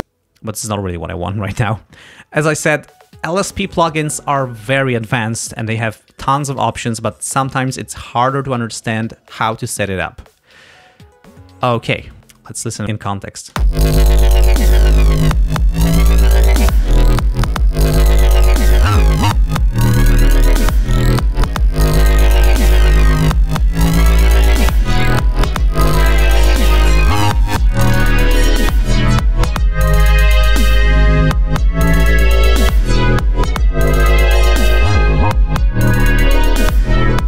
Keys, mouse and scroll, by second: 0.0 click, 12.8 click, 13.6 space, 20.9 click, 24.4-28.6 drag, 30.3 click, 31.0 ctrl+scroll down 2.